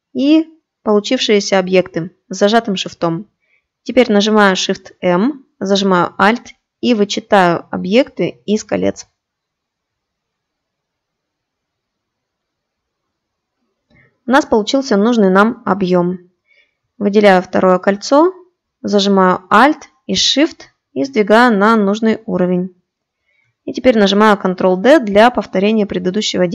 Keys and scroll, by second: 3.5 shift+m, 23.7 ctrl+d.